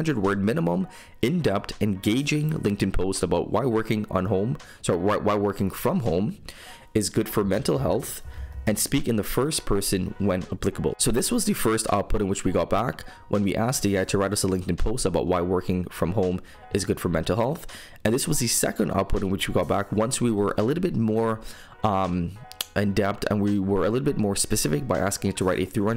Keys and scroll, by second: 11.7 super+m, 21.2 super+m.